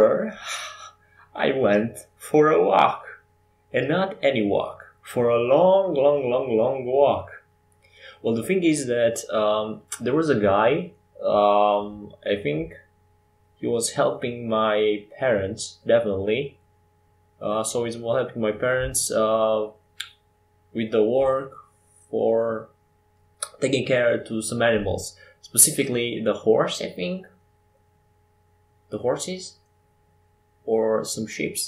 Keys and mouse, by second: 0.8 g, 2.4 ctrl+z, 2.8 ctrl+z, 3.1 ctrl+z, 5.4 ctrl+shift+z, 6.0 ctrl+shift+z, 8.5 ctrl+z, 9.6 Tab, 10.4 w, 13.3 ctrl+z, 15.4 w, 17.8 s, 19.1 Tab, 20.9 shift+d, 22.7 Tab, 23.8 Tab, 25.3 s, 26.9 s, 28.8-30.0 drag, 30.0 middle click.